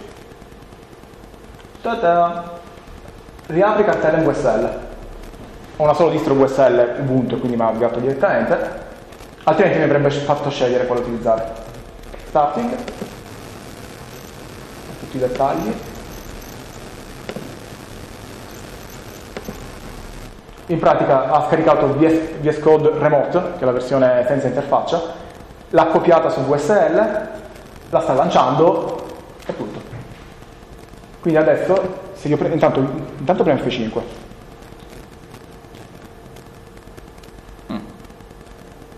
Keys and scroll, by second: 1.0 Down, 1.4 Down, 3.9 Return.